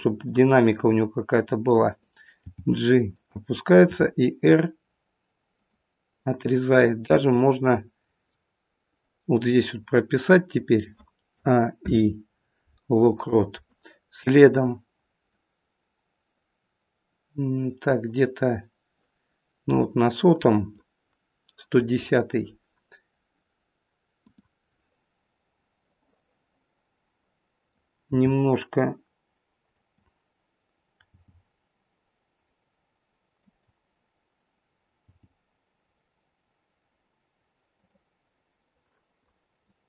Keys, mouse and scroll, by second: 38.6 click.